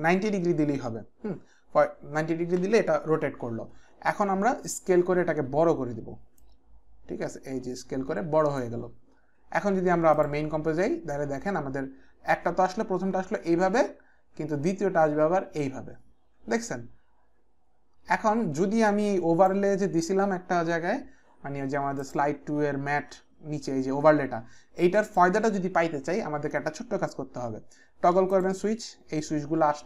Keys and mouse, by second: 0.1 KP_9, 0.3 KP_0, 0.7 Return, 6.4 click, 11.1 click, 22.0 click, 25.1 click, 28.3 click.